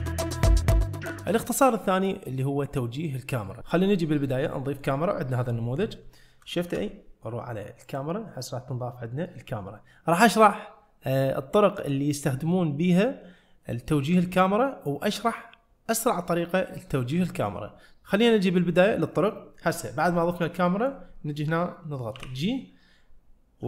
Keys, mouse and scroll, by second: 4.2-4.6 scroll down 1, 4.6 middle click, 6.7 shift+a, 8.5-9.4 middle drag, 20.7 middle click, 22.2 g.